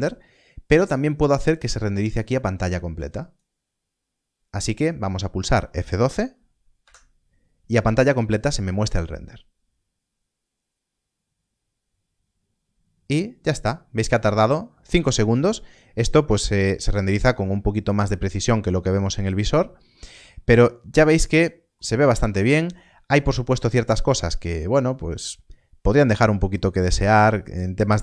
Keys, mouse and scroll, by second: 3.1 click, 10.4 F12, 10.4-12.2 scroll down 1, 13.5-15.2 scroll up 1, 17.5-19.5 scroll down 1, 19.6 scroll up 1, 20.9 middle click, 21.8 scroll down 1, 22.4 middle click, 23.0 scroll up 1, 23.6 middle click, 25.7 scroll down 1, 26.5 middle click, 26.9 scroll down 1.